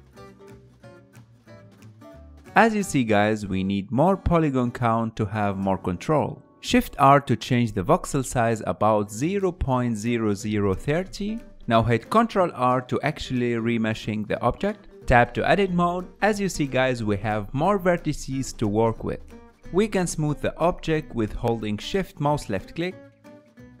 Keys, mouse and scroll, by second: 2.5-6.8 ctrl+middle drag, 6.8 shift+r, 9.2 shift+r, 13.7 ctrl+r, 15.3-16.3 ctrl+middle drag, 16.3 Tab, 16.9-19.4 middle drag, 19.4 Tab, 19.7-20.8 middle drag, 20.8 KP_1, 21.7-23.0 ctrl+middle drag, 23.0 f, 23.2 shift+click, 23.6 shift+middle click.